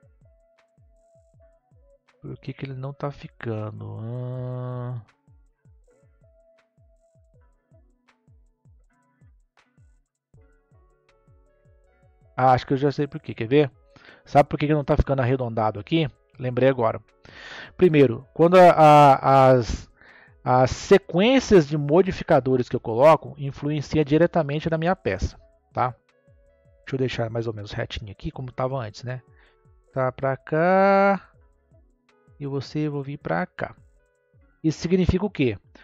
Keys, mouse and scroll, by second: 0.0-1.3 drag, 1.9-4.9 middle drag, 5.8-12.2 drag, 13.0-16.1 drag, 19.6-26.2 drag, 26.2 KP_3, 28.1 click, 32.5 click, 34.8-35.8 scroll up 1.